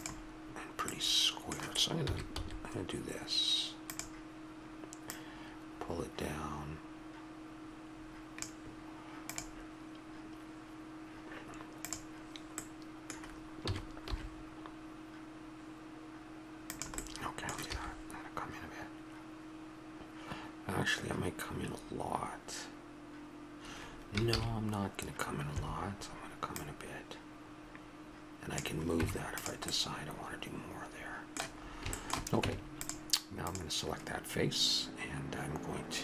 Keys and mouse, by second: 0.9-2.0 middle drag, 2.0 s, 5.1-6.9 drag, 6.9-8.4 middle drag, 12.6-16.7 middle drag, 13.6 s, 17.7 e, 29.0 Tab, 30.0 middle click, 31.6 middle click, 32.4 Tab.